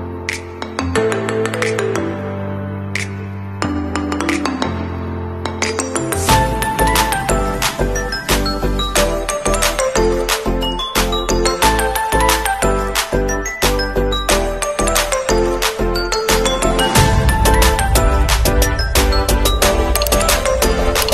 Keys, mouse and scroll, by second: 0.0 KP_1, 0.3 KP_2, 0.6 Return, 2.1 alt+Left, 2.4 alt+Left, 2.6 alt+Left, 6.5 alt+Down, 7.4 alt+Left, 7.6 alt+Left, 7.8 alt+Left, 8.5 alt+Left, 8.8 alt+Down, 10.1 alt+Left, 10.3 alt+Left, 10.9 alt+Down, 11.8 Return, 14.0 alt+scroll down 1, 14.5 alt+scroll up 1, 15.4 alt+scroll down 1, 16.1 alt+scroll up 1, 17.7-18.1 scroll up 1, 18.8 ctrl+a, 19.4 alt+click, 19.8 alt+right click, 20.0 alt+right click, 20.2 alt+Right, 20.8 alt+Right.